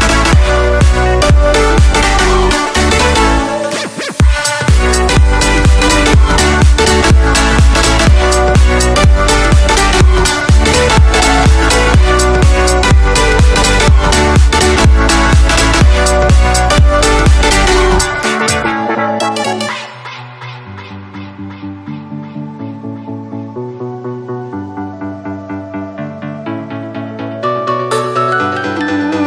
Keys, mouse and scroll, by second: 0.0 right click, 0.3 middle click, 0.8 a, 1.3 middle click, 1.5-3.4 drag, 1.5 right click, 2.5 a, 3.4 KP_0, 4.3 KP_0, 5.0-6.4 middle drag, 6.4-10.5 drag, 8.8 Tab, 10.0 a, 10.5 b, 14.2-16.1 drag, 14.8 a, 15.1 c, 19.2 right click, 19.2 x, 19.8 click, 20.1 c, 20.5-22.9 drag, 20.5 x, 21.1 Tab, 21.3 Tab, 21.8 a, 22.0 c, 24.7 x, 25.3 c, 25.7 right click, 25.7 x, 26.1 click, 26.9-28.7 middle drag, 28.7-29.2 drag.